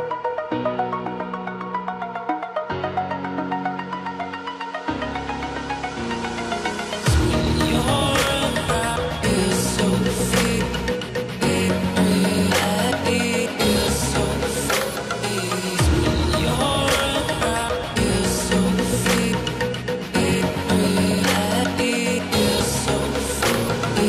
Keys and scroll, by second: 4.7 ctrl+=.